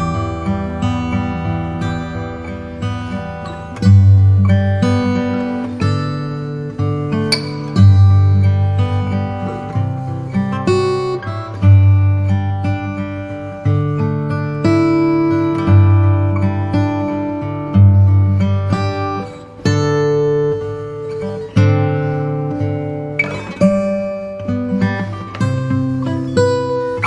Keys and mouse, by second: 0.1 middle click, 0.5 KP_1, 2.1 shift+d, 4.2 p, 6.6 click, 8.2 click, 9.9 click, 11.3 click, 13.0 click, 17.8 alt+click, 23.9 g.